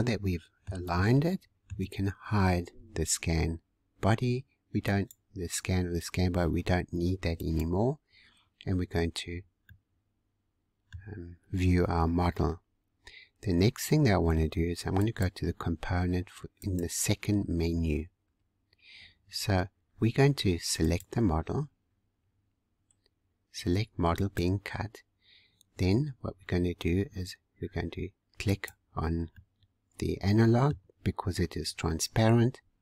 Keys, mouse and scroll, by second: 4.8 click, 7.3 click, 8.8-9.6 scroll down 1, 9.6-11.1 middle drag, 11.1 scroll down 2, 15.0 click, 16.6-19.6 drag, 20.8 click, 24.1-27.2 drag, 28.4 click, 29.2-31.1 middle drag, 31.1 scroll up 3, 31.9 scroll down 1.